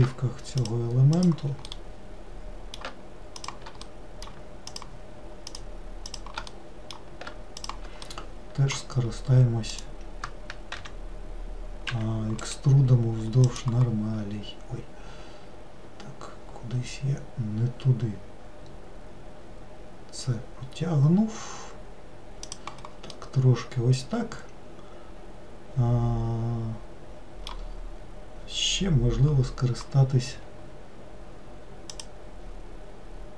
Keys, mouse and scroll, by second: 0.7 shift+click, 1.3 shift+click, 1.8-3.5 middle drag, 3.5 shift+click, 3.9 middle click, 4.8 shift+click, 5.6 shift+click, 6.2 shift+click, 6.6-7.7 middle drag, 7.7 shift+click, 8.2-9.8 middle drag, 9.8 shift+click, 10.9 e, 12.6-15.6 right drag, 23.2-26.4 middle drag, 32.0-33.3 drag.